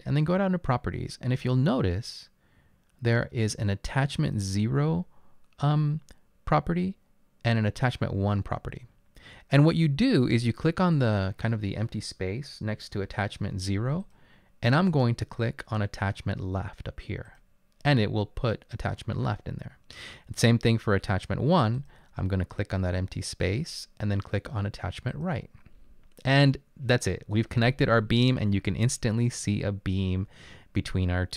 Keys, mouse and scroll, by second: 26.4-28.5 drag.